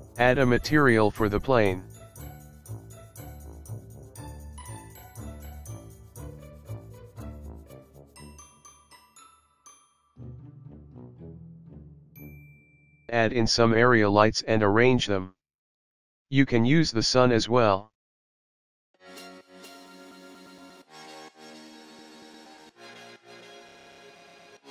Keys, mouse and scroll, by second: 0.7 click, 1.0 click, 1.7 click, 7.5 click, 8.1 KP_0, 9.5 click, 9.5 s, 10.4 click, 10.7 click, 12.1 click, 13.8 shift+a, 20.8 g, 21.3 click, 21.7 click, 22.0 KP_0, 22.4-23.0 scroll up 1, 23.0 click, 23.0-23.3 scroll up 1, 23.5 click, 23.7 KP_0, 24.2 scroll down 3, 24.4 click, 24.5 middle click, 24.6 click.